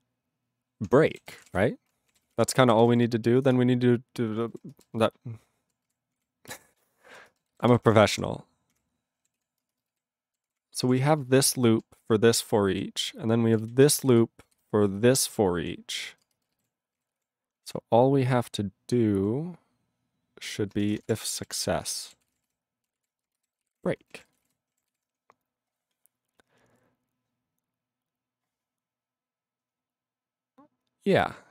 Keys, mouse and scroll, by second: 0.9-2.0 typing, 2.1 ctrl+a, 2.2 ctrl+k, 2.4 ctrl+e, 2.9 ctrl+s, 3.4 ctrl+n, 3.5 Return, 4.6 ctrl+space, 5.1 ctrl+alt+b, 5.8 ctrl+g, 6.1 ctrl+p, 6.7 ctrl+e, 7.0 ctrl+n, 7.1 ctrl+space, 7.6 ctrl+alt+b, 7.7 ctrl+g, 7.8 ctrl+l, 8.1 ctrl+l, 9.4 ctrl+s, 9.6 ctrl+space, 10.0 ctrl+alt+b, 10.4 ctrl+g, 10.5 ctrl+p, 10.8 ctrl+p, 10.9 ctrl+e, 11.0 ctrl+space, 11.4 ctrl+alt+b, 12.7 ctrl+g, 12.8-13.5 ctrl+p, 13.6 ctrl+b, 13.8 ctrl+space, 14.2 ctrl+alt+f, 14.5 ctrl+g, 14.6-15.6 ctrl+n, 15.9 ctrl+n, 16.2 ctrl+space, 16.6 ctrl+alt+b, 16.9 ctrl+g, 17.1 ctrl+p, 17.5 ctrl+p, 17.6 ctrl+e, 19.1 ctrl+n, 20.8-24.3 typing, 24.4 ctrl+g, 25.0 ctrl+s, 26.3-26.8 scroll down 1, 26.8-29.5 scroll down 3, 29.5-30.2 scroll down 8, 30.7-31.5 scroll.